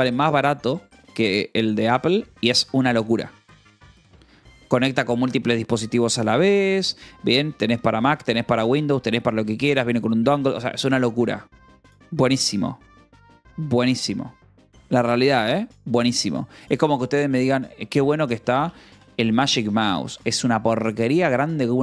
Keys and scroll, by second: 17.9 m, 18.3 g, 18.5 space, 19.1 BackSpace.